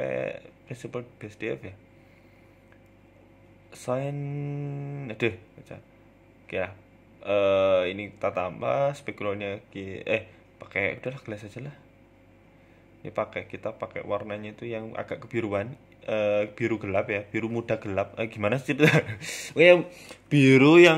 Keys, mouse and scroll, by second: 0.1 ctrl+z, 1.1-2.1 scroll down 2, 2.1-2.6 scroll down 2, 2.6 click, 3.5 click, 4.2 BackSpace, 5.0-5.4 scroll down 2, 5.5-5.9 scroll down 6, 5.9-6.5 scroll up 4, 6.5 click, 7.9 click, 11.6 click, 13.4 click, 15.6 click, 17.1 Tab, 17.4-18.0 scroll down 6, 18.0 middle click, 18.2 scroll down 1, 18.5 shift+middle click, 18.8 middle click, 19.4 scroll up 1, 20.2 shift+d.